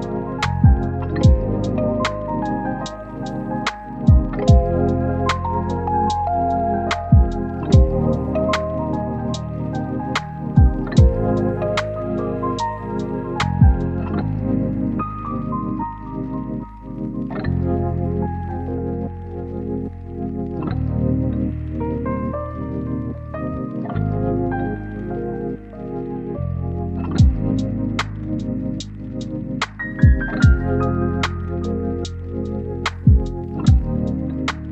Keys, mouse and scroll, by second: 2.8 scroll down 1, 2.9-3.4 scroll up 1, 3.4 scroll down 1, 3.5-4.0 scroll up 1, 4.0 click, 7.1 right click, 8.2 click, 8.5-10.7 scroll up 1, 10.7 click, 11.0 scroll down 1, 11.1-11.9 scroll up 1, 11.9 click, 12.2 right click, 12.3 scroll down 1, 12.5 right click, 12.7-13.8 scroll up 2, 12.8 right click, 13.8 click, 15.8 scroll down 1, 15.9 right click, 16.6 scroll up 1, 17.1 click, 17.2 right click, 18.1 scroll down 1, 18.2-20.2 scroll up 1, 20.2-22.1 right drag, 22.1 scroll down 1, 22.2 scroll up 1, 22.4 click, 24.4 right click, 25.3 click, 25.5 right click, 26.2 click, 26.4 right click, 26.6 scroll up 1, 26.8 right click, 28.9 click, 29.8 scroll down 1, 30.0 right click, 30.3 click, 30.5-32.6 right drag, 32.6-33.5 scroll up 1, 33.5 click, 34.2 scroll up 1.